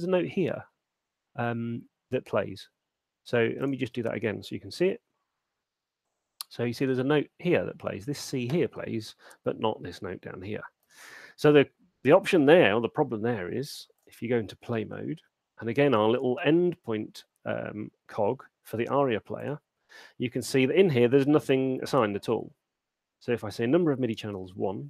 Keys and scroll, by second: 4.1 space, 6.4 alt+shift+space, 11.4 space.